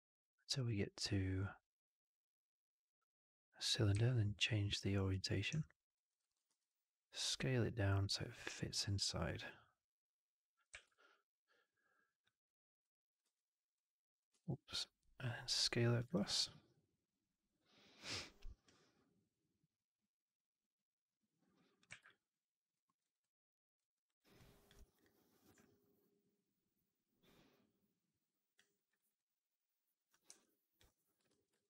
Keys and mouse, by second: 5.5-5.8 alt+drag, 6.0 alt+middle click, 6.1 alt+right drag, 6.3 r, 9.3-10.6 middle drag, 10.6 w, 10.8-12.1 alt+drag, 13.1 r, 14.2 ctrl+z, 16.0-18.0 alt+drag, 18.8-21.7 right drag, 21.8 w, 21.9-22.6 alt+drag, 22.7 alt+middle drag, 22.9 alt+right drag, 23.1-23.6 alt+drag, 23.8 middle drag, 24.1 right drag, 24.2-24.5 drag, 24.8 click, 25.5-28.4 alt+drag, 28.6 alt+right drag, 28.8 alt+right click, 29.0-30.0 alt+drag, 30.2 3, 30.7 click, 31.2 shift+x, 31.5 alt+click.